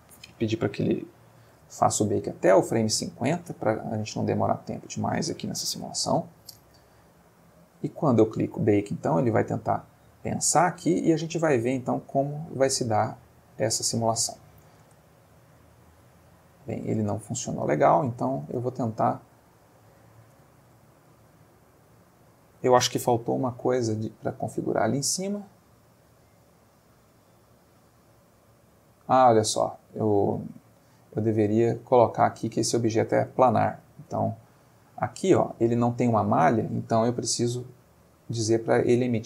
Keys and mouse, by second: 1.4 5, 1.5 0, 1.8 Return, 4.7 click, 5.7 5, 5.8 0, 6.1 Return, 7.6 click, 14.8 space, 17.0 space, 17.8 click, 18.4 Tab, 19.2 e, 20.0 click, 20.3 Tab, 28.4 click, 31.3 click, 31.8 click, 33.4 Tab, 34.1 x, 34.3 click, 35.0 Tab, 37.7 click.